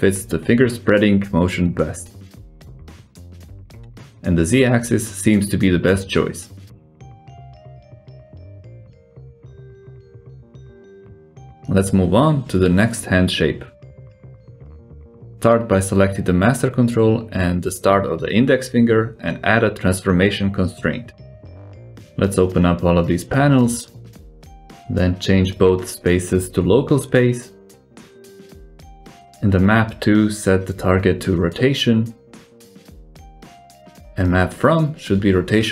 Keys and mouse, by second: 1.1 click, 1.6 s, 3.9 click, 5.0 click, 5.7 s, 8.4 r, 11.2 g, 14.2 click, 14.7 n, 15.4 alt+z, 17.1 click, 17.9 shift+click, 18.4 ctrl+shift+c, 22.0 click, 23.7 click, 24.5 click, 25.6-26.7 drag, 27.2-28.1 drag, 31.5 click.